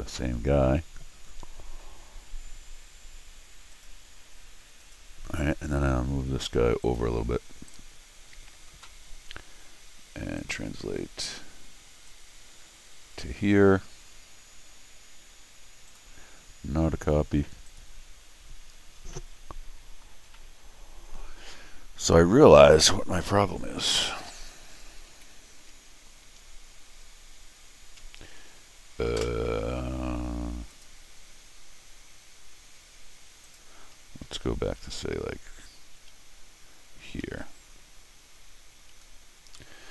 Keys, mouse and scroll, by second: 0.2-1.8 middle drag, 3.7 click, 4.8 click, 6.8 click, 7.7 click, 10.4 click, 12.1-13.2 drag, 15.9 click, 17.7 click, 19.1 middle click, 20.3 scroll down 1, 20.4-21.4 middle drag, 23.9 click, 25.1 s, 30.7 click, 33.4 click, 37.2 ctrl+alt+r, 39.6 middle click.